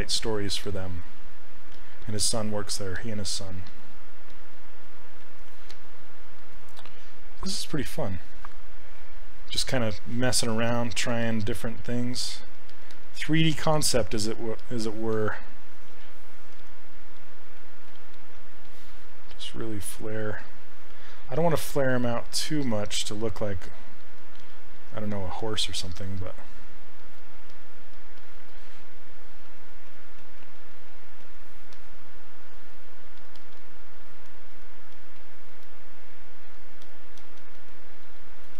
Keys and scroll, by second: 10.7 s, 16.6 s, 27.5 s.